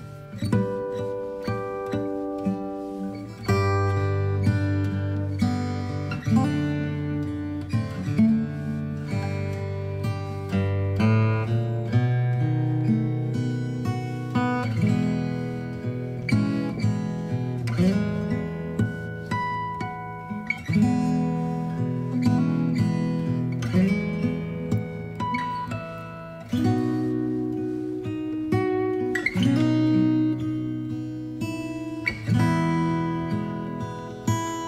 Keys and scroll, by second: 8.6 Down, 8.9 Down, 9.0 Down, 9.2 Right, 11.7 ctrl+d, 16.9 g, 18.6 ctrl+z, 19.5 v, 21.9 Return.